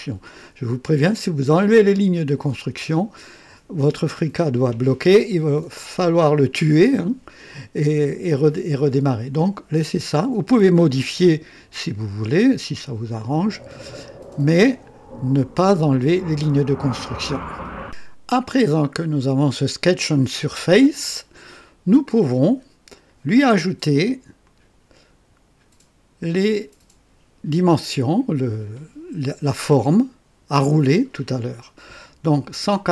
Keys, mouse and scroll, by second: 17.8 click, 24.4 click.